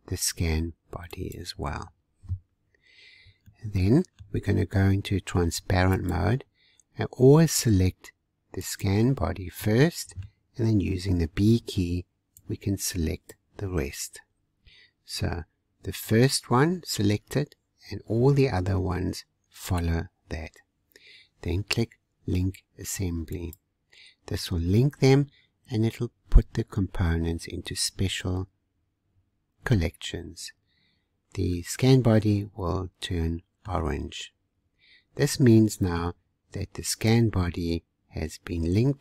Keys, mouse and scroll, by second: 1.1 click, 3.5-6.0 shift+middle drag, 6.0 click, 6.8-8.6 scroll up 1, 8.6 click, 9.7-11.5 middle drag, 11.5 b, 23.3-26.4 drag, 31.5-34.3 middle drag, 34.3-34.8 scroll up 1, 35.4-37.1 middle drag, 37.1 click.